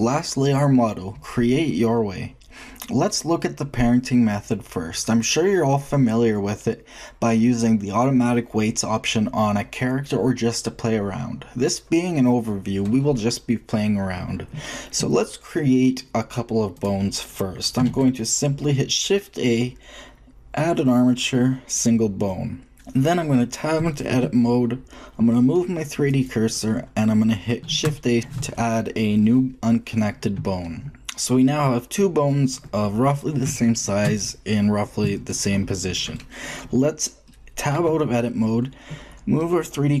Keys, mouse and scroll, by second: 17.1-19.8 middle drag, 17.8 shift+a, 22.7-23.8 middle drag, 24.1 Tab, 26.0-27.5 drag, 27.5 ctrl+shift+a, 37.7 shift+Tab, 39.8 middle click, 39.9-40.0 drag.